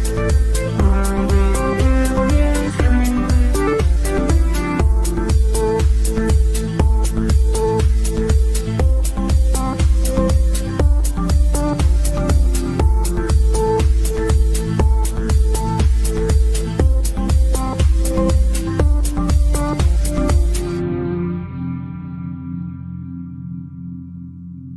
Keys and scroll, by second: 6.7 c.